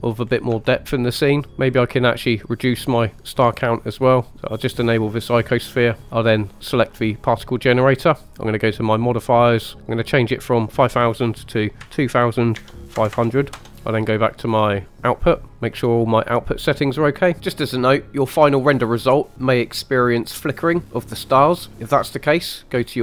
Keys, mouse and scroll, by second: 0.2-0.6 scroll down 2, 0.6 shift+middle click, 4.8 click, 6.0-6.9 scroll down 2, 7.1 click, 9.1 click, 10.3-14.4 drag, 13.1 KP_0, 15.0 click, 17.2 scroll down 1.